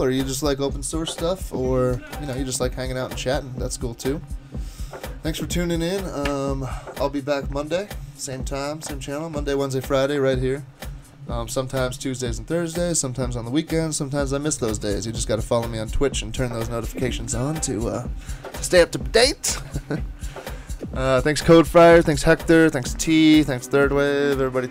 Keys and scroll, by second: 2.0 super+Tab, 2.2 super+Tab, 2.4 super+Tab.